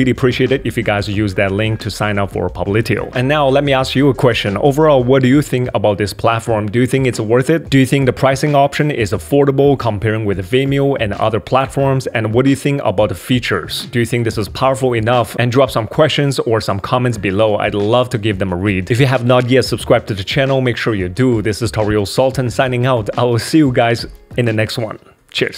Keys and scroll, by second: 7.7 super+3, 11.7 super+2.